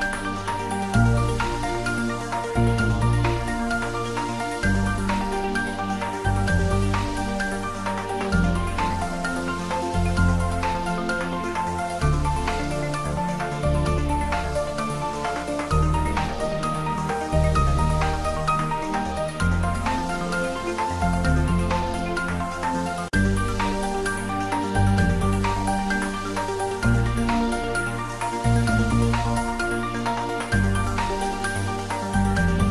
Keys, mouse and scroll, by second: 0.7-1.0 scroll up 1, 1.0 click, 3.1 click, 4.2 click, 5.9 typing, 7.3 click, 9.5-12.0 drag, 12.0 typing, 18.8 click, 22.4-22.7 typing, 24.1 click, 27.3-28.1 scroll down 1, 30.9-31.7 scroll down 1, 31.7 click.